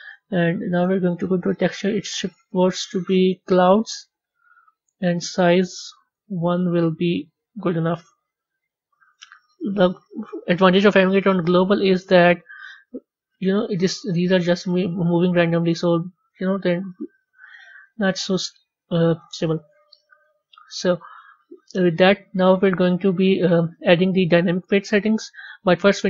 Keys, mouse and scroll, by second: 1.9-4.0 drag, 4.0 scroll down 3, 5.1-8.0 drag, 10.9 g, 12.5 click, 16.1 click, 17.3-18.9 drag, 18.9-20.2 middle drag, 20.2 a, 22.2 click.